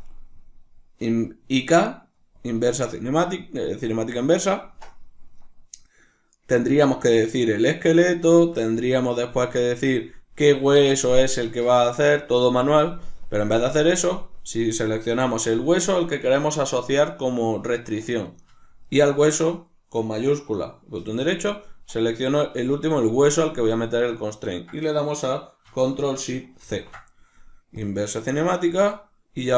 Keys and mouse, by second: 6.4-14.8 drag, 11.6 Escape, 14.8 right click, 18.9-23.0 shift+right drag, 26.6 ctrl+shift+c, 29.4 right click.